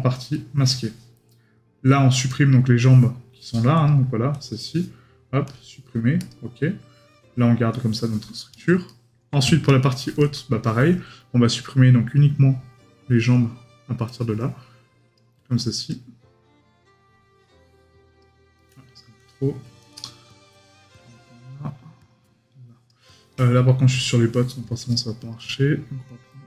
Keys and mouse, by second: 8.9 right click.